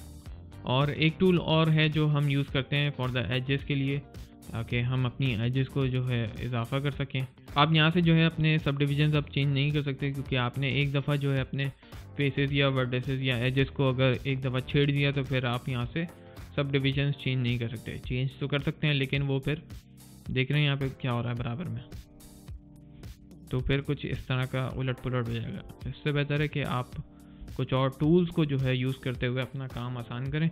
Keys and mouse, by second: 1.2 alt+middle click, 1.8 alt+click, 2.2 alt+middle click, 18.7 alt+click, 24.2 alt+middle click, 24.7 alt+click, 25.6 alt+middle click, 26.0 alt+click, 26.5 alt+right click, 26.9 middle click, 27.3 click.